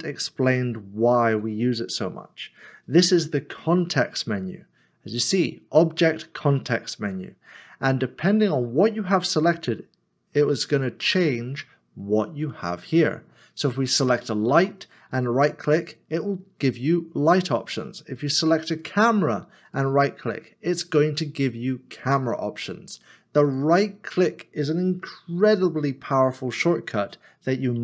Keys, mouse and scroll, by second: 3.8-5.8 scroll down 1, 15.1 right click, 19.7 right click.